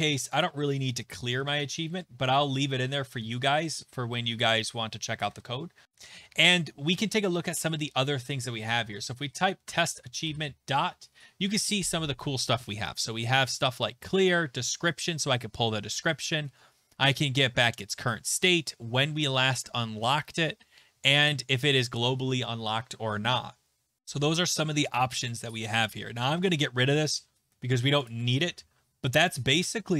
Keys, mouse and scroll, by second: 0.2 click, 0.4 click, 1.2 /, 1.4 /, 2.6 Left, 2.7 Left, 4.5 click, 5.3 Return, 5.8 Return, 8.4-9.5 typing, 9.7 Tab, 16.9-18.5 scroll, 24.0 scroll, 25.5 click, 26.2 BackSpace, 26.4 BackSpace, 28.1 click, 28.4 ctrl+s.